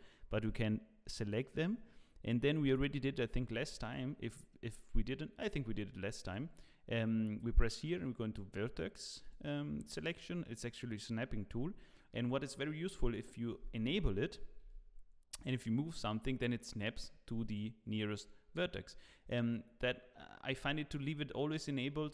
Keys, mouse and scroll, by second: 3.8 click, 6.2 click, 12.8 click, 14.6 g.